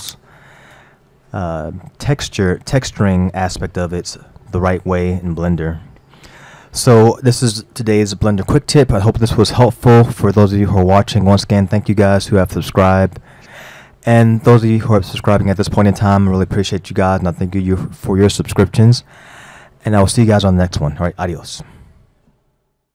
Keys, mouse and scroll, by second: 0.0-1.8 drag, 1.8-2.4 scroll down 4, 10.1-15.2 middle drag.